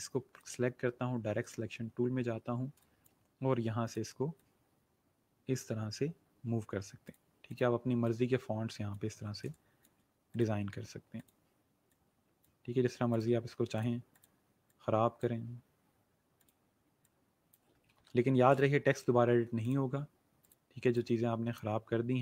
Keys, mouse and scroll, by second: 2.0-2.4 alt+scroll up 1, 2.6 scroll up 1, 2.7 click, 9.4 space, 9.5 click, 18.0-18.6 alt+scroll down 2, 18.6 click, 19.0 space, 19.6 click.